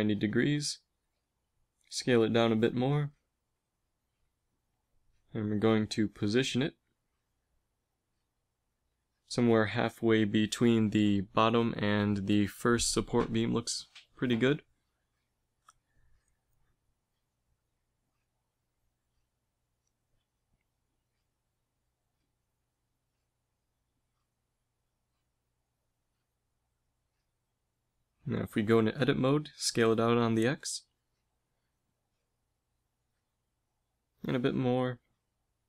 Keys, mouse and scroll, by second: 2.5 s, 4.1 KP_3, 4.7 z, 5.6 g, 10.0 g, 13.8 g, 16.3 s, 22.5 g, 24.4 z, 25.1 KP_1, 27.0 g, 28.3 Tab, 29.6 s, 34.3 z, 34.7 s.